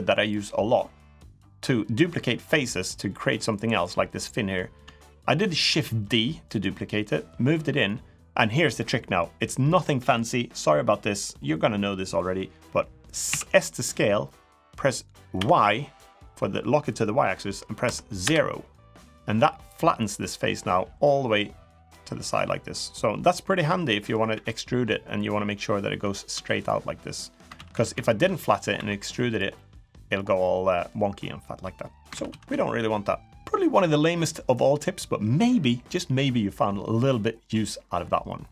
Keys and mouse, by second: 2.2 middle click, 5.4 shift+d, 7.1 click, 13.0 s, 19.5-21.9 middle drag, 22.2 middle click, 23.2 middle click, 24.1 e, 25.3 middle click, 26.1 3, 27.3 ctrl+z, 28.1 middle click, 28.5 e, 29.3 middle click, 30.2 middle click, 31.9 ctrl+z, 33.1 click.